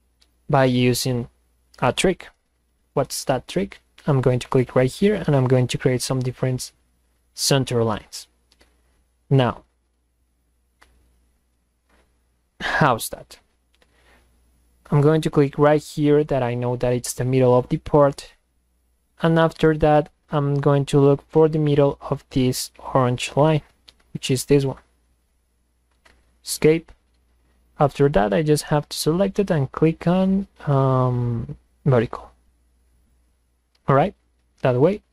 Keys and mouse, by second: 4.5 click, 7.9 click, 15.9 click, 24.1 click, 25.9 Escape, 27.7 click, 28.7 click, 31.9 click, 33.0 click, 34.0-35.1 drag.